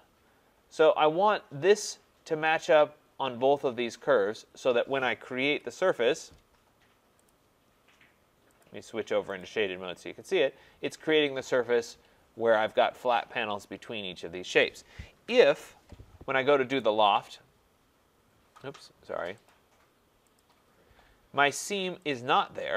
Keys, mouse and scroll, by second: 5.4 Return, 7.3 click, 8.6 click, 9.4 click, 15.1 click, 15.2 ctrl+z, 16.8 right click, 19.5 click, 20.4 click, 22.1 click.